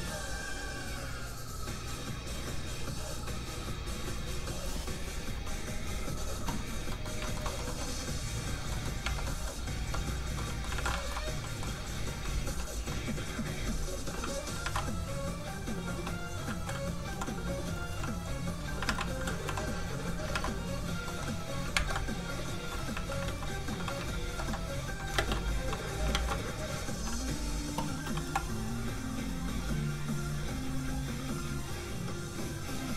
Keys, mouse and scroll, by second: 6.2-6.9 shift+scroll down 2, 6.9 middle click, 7.2 shift+middle click, 7.4 middle click, 7.5 middle click, 7.9 scroll up 1, 8.2-8.7 scroll down 1, 8.7 middle click, 9.0 Tab, 9.2 middle click, 9.5 scroll up 1, 10.3 middle click, 10.7 alt+a, 10.9 shift+middle click, 11.4 middle click, 11.5 middle click, 12.7 l, 14.6 alt+a, 14.8-17.1 scroll down 1, 17.1 l, 18.8 alt+a, 19.4 a, 19.5 l, 20.3 alt+a, 21.0 middle click, 21.7 ctrl+Tab, 23.2 alt+shift+z, 23.9 ctrl+alt+z, 24.1 ctrl+Tab, 25.1 ctrl+space, 26.1 alt+shift+z, 26.6-28.2 shift+scroll down 2, 28.2 n, 29.4 click.